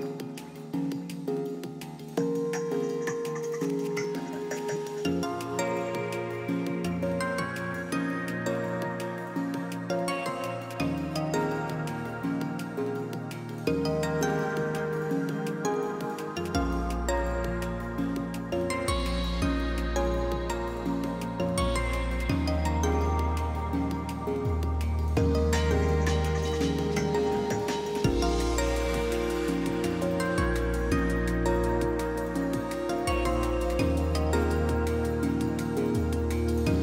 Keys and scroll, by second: 0.0-0.7 typing, 7.5 q, 30.9 ctrl+b.